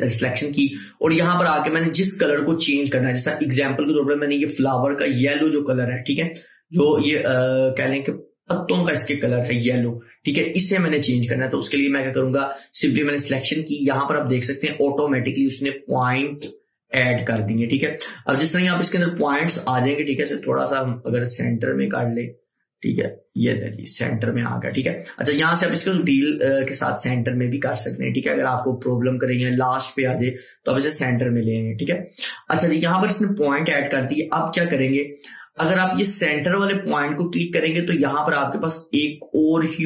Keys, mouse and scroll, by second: 8.6 click, 17.3-34.2 drag, 37.9 click, 38.0-39.8 drag.